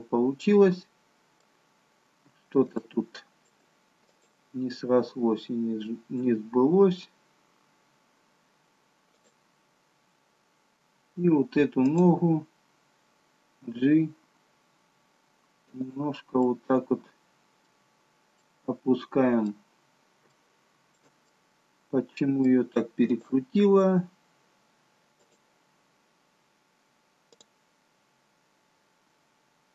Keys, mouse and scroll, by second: 1.7 scroll up 1, 2.7 shift+middle click, 4.1 click, 6.2 g, 11.9 click, 13.6 g, 16.4 middle click, 18.0-18.4 scroll down 1, 18.4 middle click, 19.7-20.2 scroll up 1, 20.2 scroll up 1, 20.4 shift+middle click, 21.2 middle click, 23.1 click, 25.2 click.